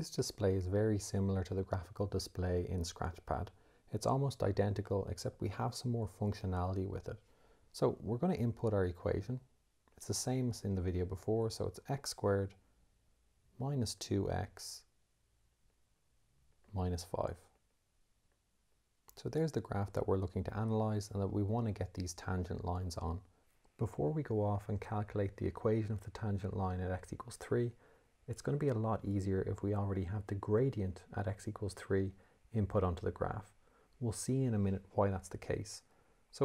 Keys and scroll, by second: 11.5 x, 13.8 -, 14.5 2, 15.8 x, 16.8 -, 17.8 5, 18.7 Return.